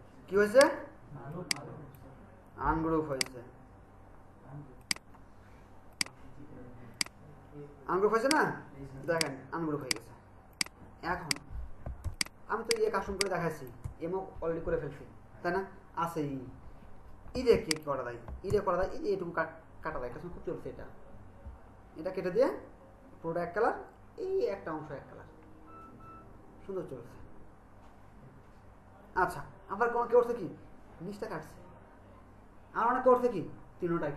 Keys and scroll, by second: 12.0 ctrl+space, 17.6 ctrl+space.